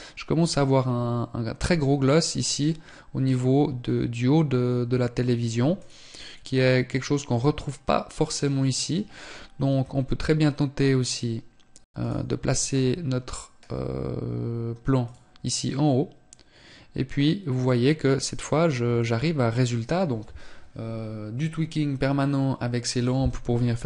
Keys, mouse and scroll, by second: 9.3 r, 12.4 g.